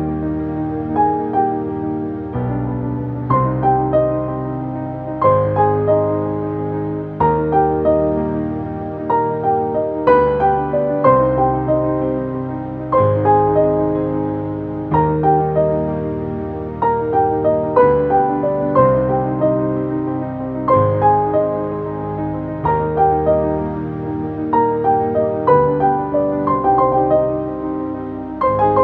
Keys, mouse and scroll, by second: 1.4 ctrl+space, 1.5 ctrl+click, 1.8 ctrl+space, 2.4 space, 2.7 click, 4.5-9.3 shift+drag, 9.5-11.5 drag, 14.2 click, 15.2 Up, 17.0 click, 18.0-18.4 scroll down 1, 19.9 click, 22.6-23.5 scroll down 1, 23.5 click, 25.5 ctrl+space, 25.7 ctrl+click, 26.3 space, 26.9 click.